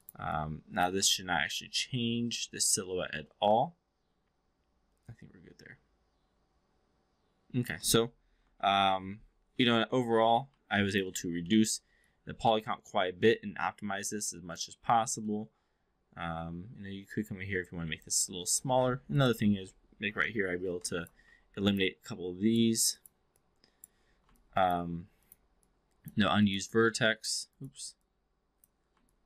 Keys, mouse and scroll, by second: 0.4 click, 1.1-7.7 alt+drag, 8.4 shift+i, 9.7 4, 10.7 click, 11.3-11.7 alt+middle drag, 12.0-14.7 alt+drag, 15.3 alt+drag, 19.1 click, 20.0 shift+i, 20.8 alt+click, 21.2 1, 22.1-22.6 drag, 22.9 click, 23.3-23.9 drag, 24.3 alt+click, 25.1 click, 25.6 click, 26.7 click, 27.5 click, 28.1 click, 29.0-29.2 alt+drag.